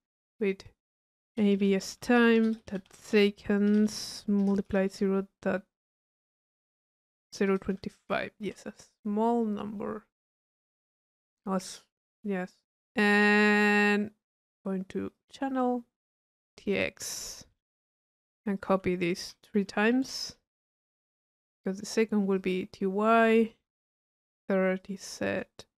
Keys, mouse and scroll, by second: 0.6 drag, 9.4-11.2 middle drag, 12.5 middle click, 13.2-13.6 drag, 14.2 click, 15.1 click, 16.2 middle click, 16.7-17.1 drag, 18.6 click, 19.1 c, 21.4 click, 22.3 click, 23.8 click, 24.0 middle click, 24.8 click.